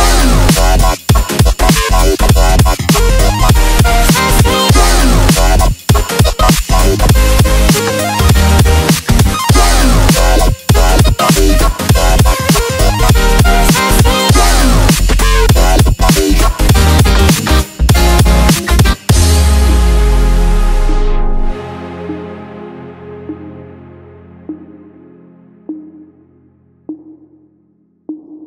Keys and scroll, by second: 8.8 shift+super+g, 9.0 shift+super+g, 9.2 shift+super+g, 9.4 shift+super+g, 12.5 alt+shift+super+d, 15.5-17.6 typing, 23.0 super+d, 23.5 super+d, 23.6 super+d, 23.7 super+d, 24.2 super+d.